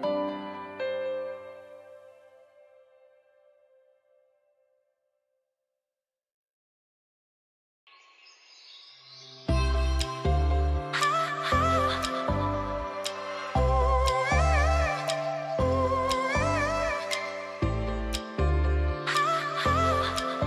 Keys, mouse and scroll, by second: 1.1-3.3 drag, 2.2-3.2 click, 3.3 space, 10.7 space, 10.8-14.6 drag, 14.7 space, 14.9 click, 15.3 space, 15.4-19.0 drag.